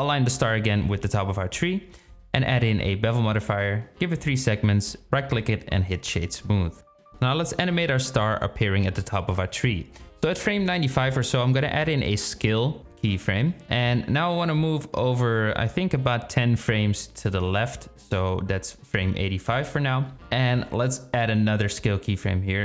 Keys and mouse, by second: 0.7 click, 2.9 click, 3.1 click, 4.3-5.2 right drag, 10.6 i, 13.3-14.8 drag, 20.5-22.0 drag.